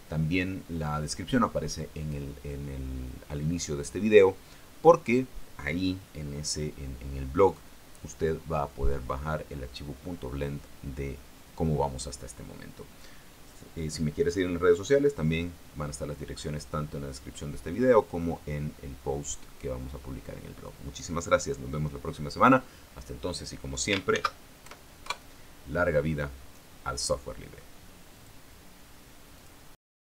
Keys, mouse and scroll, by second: 24.8 ctrl+shift+s, 25.3 ctrl+shift+KP_Add, 25.7 ctrl+shift+KP_Enter, 28.8 click, 30.0 click.